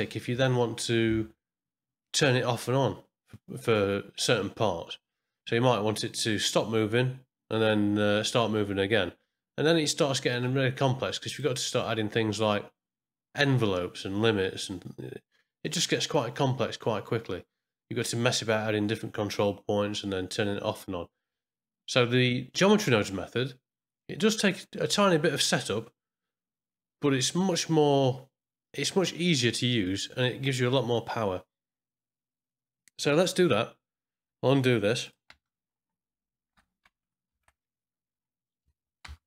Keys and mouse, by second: 11.3-15.7 drag, 35.0 click, 35.3 space, 37.3 shift+Left, 38.6 a, 39.0 x.